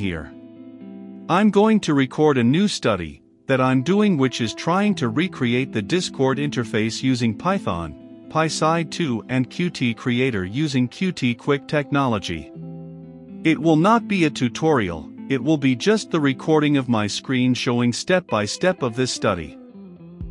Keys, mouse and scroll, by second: 2.0 scroll down 1, 2.7-7.1 drag, 7.3 shift+super+s, 10.0-20.3 drag.